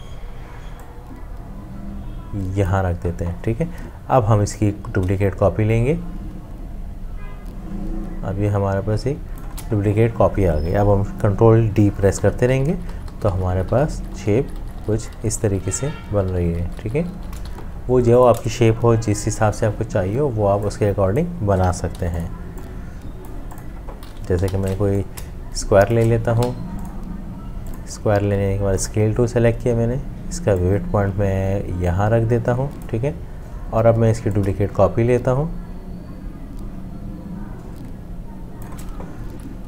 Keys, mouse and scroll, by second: 4.6 alt+click, 12.2 ctrl+d, 17.4 v, 21.9 ctrl+g, 24.4 m, 25.3 shift+click, 26.4 v, 34.4 alt+click.